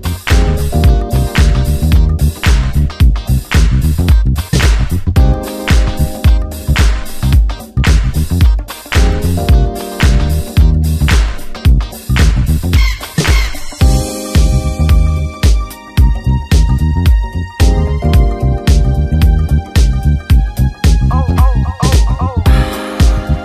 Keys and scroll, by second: 0.8 Return, 1.4 shift+F2, 2.0 space, 4.6 Return, 5.2 ctrl+m, 6.7 Return, 8.0 ctrl+d, 8.4 ctrl+b, 9.7 Return, 10.0 space, 10.4 space, 11.4 ctrl+g, 13.4 Return, 16.8 s, 17.0 ctrl+space, 17.8 space.